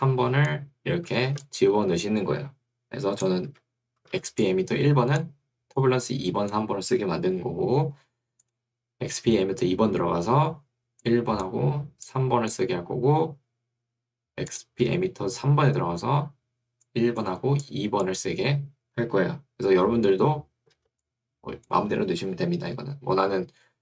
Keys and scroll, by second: 3.5 Escape, 7.1 Escape, 22.3 Escape.